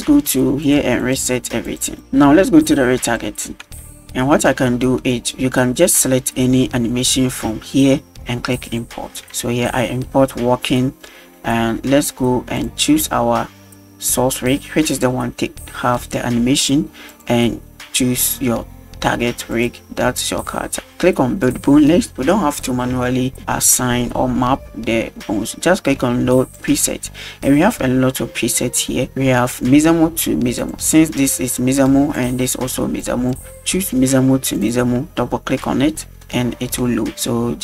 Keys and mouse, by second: 0.6 click, 1.0 click, 1.6 click, 3.1 click, 3.9 shift+middle drag, 8.7 click, 9.4-10.1 middle drag, 12.6 click, 14.9 click, 17.1 click, 19.5 click, 21.5 click, 22.6 middle click, 26.4 click.